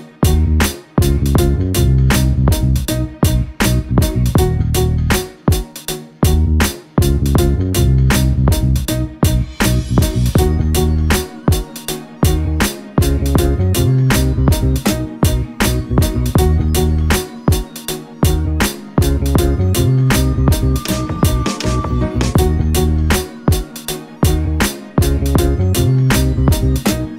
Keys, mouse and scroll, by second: 9.2 alt+click, 9.7 ctrl+alt+click, 10.3 alt+shift+click, 10.8 alt+click, 11.8 shift+click, 12.3 ctrl+alt+click, 13.4 alt+shift+click, 13.7 shift+click, 14.3 alt+click, 14.6 shift+click, 15.5 alt+click, 15.9 shift+click, 16.1 alt+click, 16.8 alt+shift+click, 17.3 alt+click, 17.5 ctrl+alt+click, 17.6 alt+shift+double click, 18.2 alt+click, 18.3 alt+shift+click, 18.7 space, 18.8 alt+click, 22.2 shift+click, 22.5 alt+click, 22.7 shift+click, 23.1 alt+click, 23.3 alt+shift+click, 24.7 alt+click, 25.9 ctrl+alt+click.